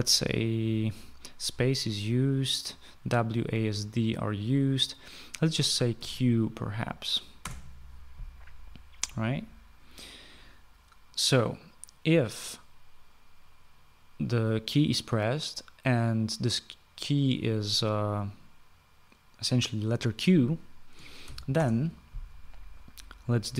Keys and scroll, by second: 6.5 q, 7.9 Return, 21.7 {, 22.0 Return.